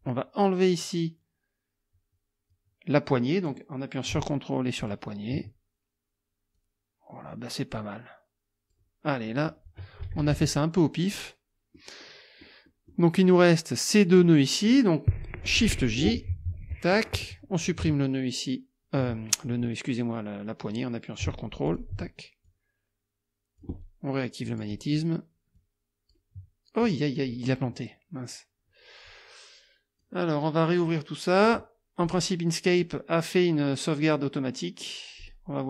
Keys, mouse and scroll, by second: 4.8 ctrl+click, 6.6-8.9 drag, 9.3 click, 10.0 KP_Subtract, 11.1 click, 12.1 click, 13.4 click, 16.5 shift+j, 16.9 shift+click, 19.5 ctrl+click, 21.7 ctrl+click, 22.5-23.8 ctrl+drag, 24.5 click, 25.6 click, 26.3 click, 30.0 click, 32.1 click, 35.2 right click.